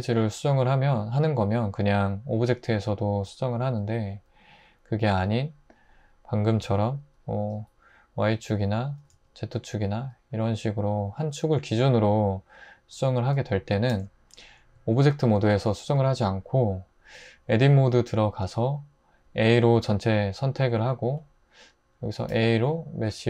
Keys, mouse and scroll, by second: 6.6 s, 7.1 y, 9.0 typing, 13.9 super+z, 14.8 super+z, 17.2 Tab, 19.4 a, 22.3 a.